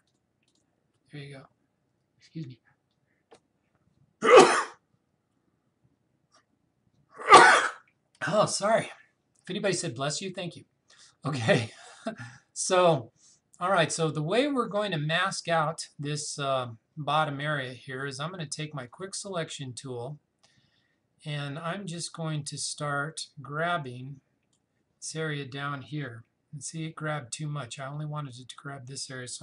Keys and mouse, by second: 18.9 click, 22.1-29.2 drag.